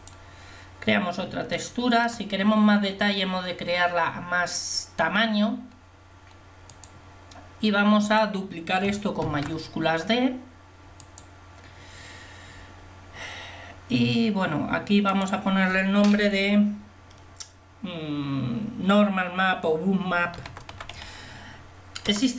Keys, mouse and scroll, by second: 9.3 shift+d.